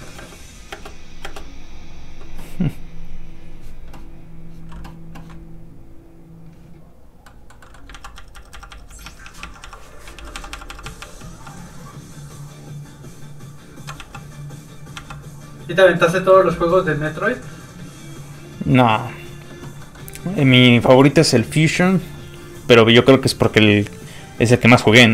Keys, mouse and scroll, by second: 0.1 space, 3.2 click, 6.0 click, 7.2 middle click, 7.9 ctrl+z, 10.1 ctrl+shift+z, 14.0 ctrl+z, 14.1 ctrl+z, 14.9 ctrl+z, 16.2 middle click, 17.1 click, 19.8 middle click, 24.3 click.